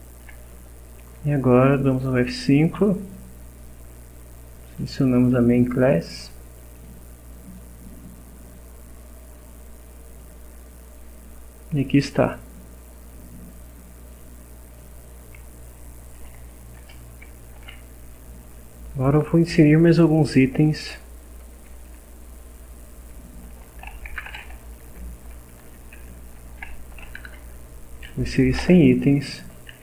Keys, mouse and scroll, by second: 2.8 F5, 4.7 click, 6.6 click, 9.4-10.4 drag, 14.1 click, 14.7 click, 16.8 Return, 17.3-18.5 typing, 20.8 space, 23.0-27.2 typing, 28.6 Return, 29.7 Delete.